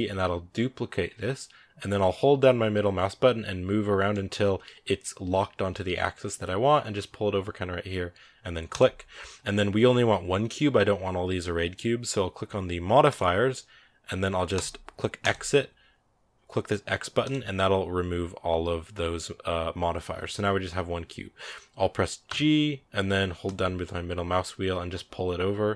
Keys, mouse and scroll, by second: 14.4-17.2 drag, 22.1 g.